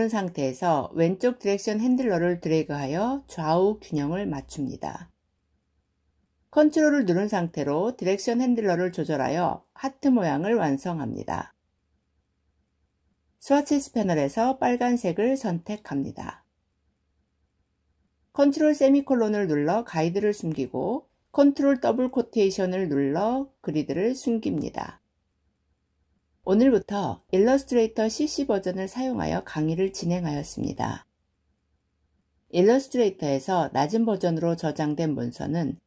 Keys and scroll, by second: 18.3 ctrl+;, 21.3 ctrl+'.